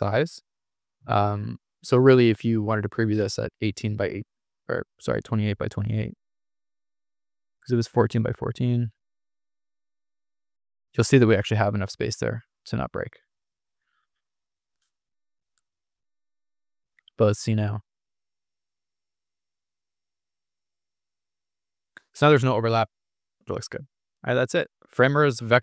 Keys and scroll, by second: 5.1-5.9 typing, 8.6-9.4 typing, 11.2-12.0 typing, 13.9 super+z, 15.1 super+z, 18.3 super+r.